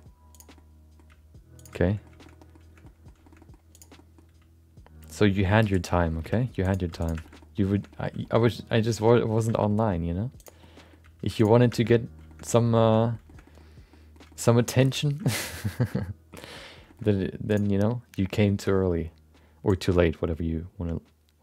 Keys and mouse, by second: 0.3 click, 0.5 middle click, 1.0 g, 1.8 middle click, 2.2 middle click, 2.3 middle click, 2.8 middle click, 3.2 shift+middle click, 3.4 middle click, 3.7 click, 4.0 middle click, 4.3 g, 5.9 middle click, 6.2 r, 6.7 g, 7.2 shift+middle click, 7.4 middle click, 7.7 shift+middle click, 7.9 middle click, 8.2 shift+middle click, 8.4 middle click, 8.7 middle click, 9.5 shift+middle click, 9.7 middle click, 10.4 click, 10.6 middle click, 11.0 g, 11.7 middle click, 11.9 middle click, 12.2 shift+middle click, 12.4 middle click, 12.8 middle click, 13.0 middle click, 13.2 shift+middle click, 13.4 middle click, 13.9 middle click, 14.3 shift+middle click, 14.4 middle click, 15.0 Tab, 15.2 shift+middle click, 15.4 middle click, 15.8 shift+middle click, 15.9 middle click, 16.5 middle click, 16.8 shift+middle click, 17.0 middle click, 17.5 click, 17.8 middle click, 19.7-21.4 drag.